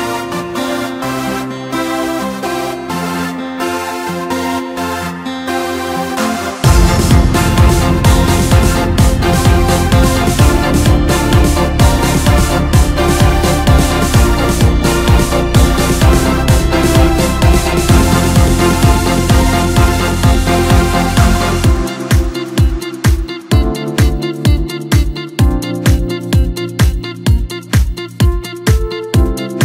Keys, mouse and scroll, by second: 1.2 click, 2.8 click, 5.5-8.2 middle drag, 8.2 click, 8.4 click, 10.9 click, 11.8 click, 14.2 click, 14.3 click, 22.2 click, 23.3-23.7 drag, 25.4 click, 26.6 click, 27.7-29.6 middle drag.